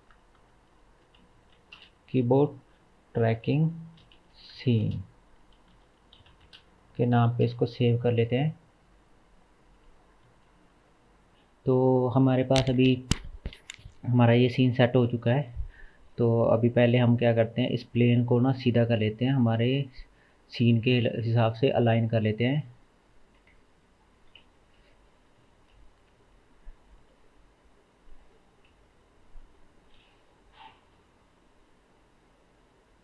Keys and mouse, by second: 10.3 ctrl+s, 10.5 ctrl+s, 10.8 ctrl+s, 20.8-21.7 middle drag, 21.7-32.0 drag, 28.7 KP_0, 29.4 KP_0, 31.0 alt+h.